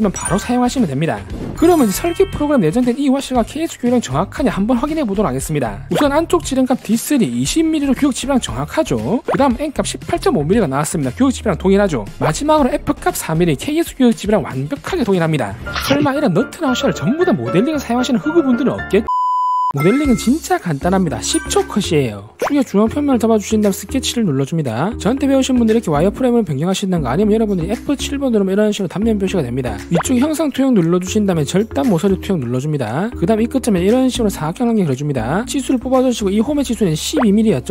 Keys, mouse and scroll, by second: 23.7 click, 24.3 s, 26.5 alt+w, 27.5 alt+q, 31.3 click, 32.7 click, 34.3 click, 35.0 click, 35.6 d, 35.9 click, 36.5 click, 37.0 click.